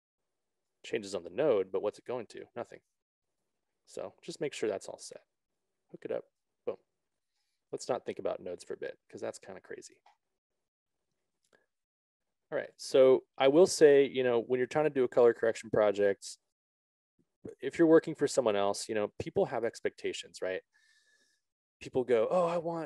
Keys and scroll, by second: 3.6 ctrl+z.